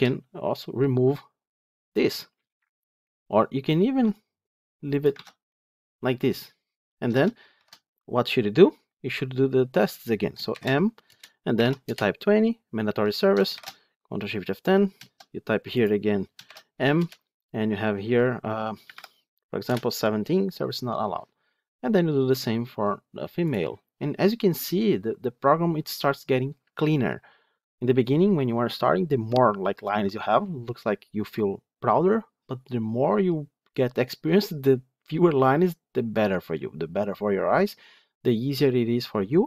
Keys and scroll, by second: 5.0 ctrl+x, 7.4 ctrl+shift+F10, 13.4 ctrl+shift+F10.